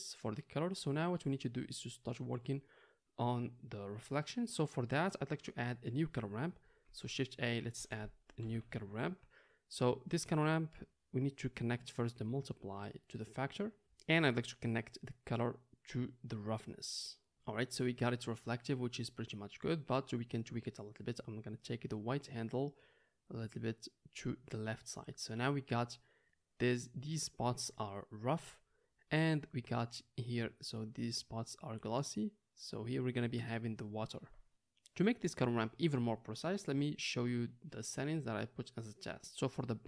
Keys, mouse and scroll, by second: 6.8 shift+a, 12.0-39.8 drag.